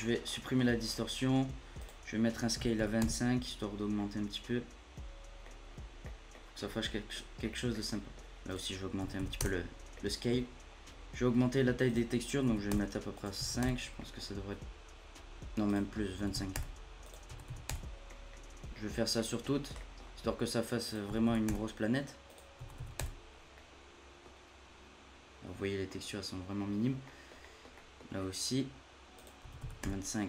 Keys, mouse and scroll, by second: 0.0 middle click, 0.2-1.8 scroll up 5, 0.6 middle click, 1.8-4.0 drag, 4.0-5.6 middle drag, 5.6-6.0 scroll down 1, 6.0 middle click, 6.6 scroll down 8, 6.8 middle click, 7.1-7.4 scroll up 1, 7.4-8.5 middle drag, 8.5-9.9 drag, 9.9 middle click, 10.3-10.7 scroll up 2, 10.7 scroll down 1, 10.9 middle click, 11.8-14.0 drag, 14.0 middle click, 14.2 scroll down 1, 14.5-15.6 scroll up 1, 15.6-17.8 drag, 17.8 scroll down 1, 18.0 middle click, 19.0 scroll down 1, 19.1 middle click, 19.4-20.8 scroll up 3, 19.8 middle click, 20.8-23.5 drag, 23.5-24.3 middle drag, 24.3-25.0 scroll up 2, 25.0-25.4 scroll up 1, 25.4-25.8 scroll down 1, 25.8-26.8 middle drag, 26.8 scroll down 2, 27.0-28.0 middle drag, 28.0 scroll up 5, 28.2-29.1 scroll down 3, 29.1-30.2 drag.